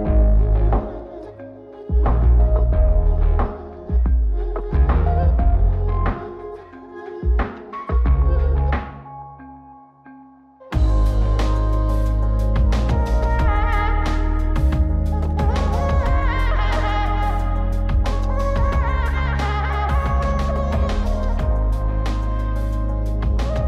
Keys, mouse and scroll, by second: 6.1-7.6 middle drag, 8.2 middle click, 8.3 F9.